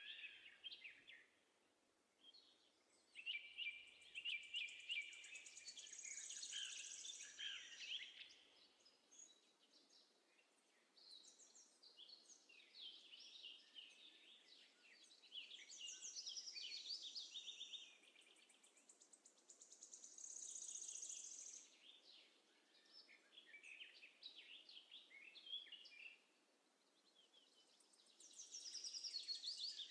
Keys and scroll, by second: 9.7 Down, 9.9 Down, 11.3 z, 12.9 space.